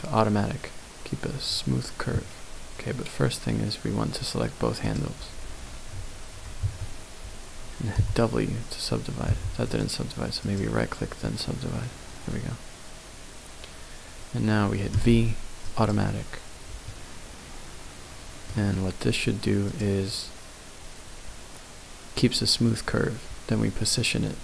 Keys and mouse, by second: 6.6 a, 7.9 w, 9.3 w, 9.6 right click, 11.2 middle click, 14.9 v, 16.9-18.5 middle drag.